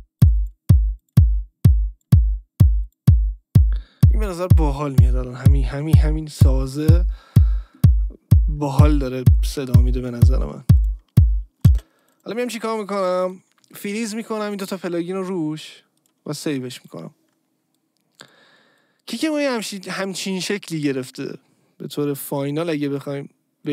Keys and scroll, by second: 11.7 space.